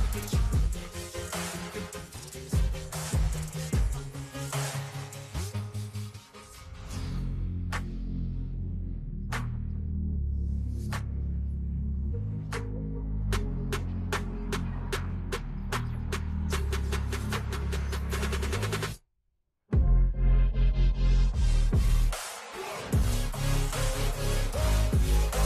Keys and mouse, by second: 0.1 Return, 0.7 click, 1.4 click, 1.9 Left, 2.5 Right, 3.9 click, 6.0 click, 9.4 click, 10.7 KP_3, 13.2 click, 14.3-15.9 shift+drag, 18.5 click, 18.7 click, 19.6 click, 20.8 click, 22.3 ctrl+t.